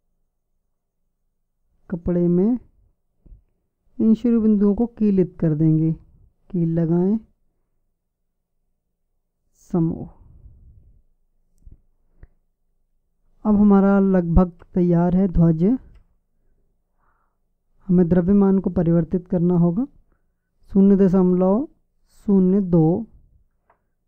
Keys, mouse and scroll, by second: 0.6 Tab, 3.7-5.5 drag, 8.9-12.4 drag.